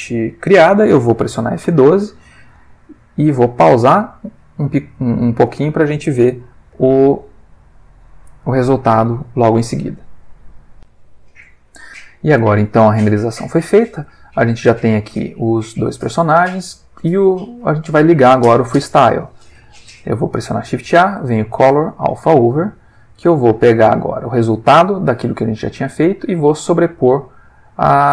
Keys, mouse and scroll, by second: 2.5 F12, 5.9 click, 6.7 F12, 10.7 click, 13.3 middle click, 15.9 click, 18.9 click, 20.1 shift+a, 21.9 click, 22.4 click, 23.6-26.4 drag, 27.5 click, 27.9-28.1 middle drag.